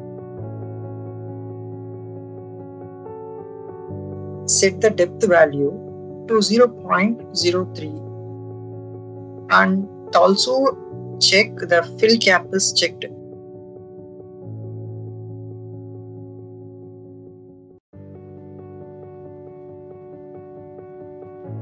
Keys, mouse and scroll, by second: 2.0 click, 5.1 click, 6.1 click, 9.0 click, 10.2 click, 12.4 click, 13.5 click, 14.3 click, 15.0 click, 17.9 r, 18.7 click, 19.6 click, 20.1-21.2 drag.